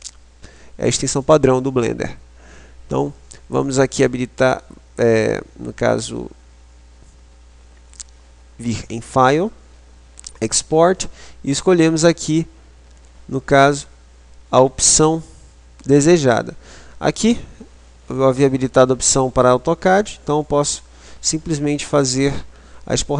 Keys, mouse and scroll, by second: 7.4 click.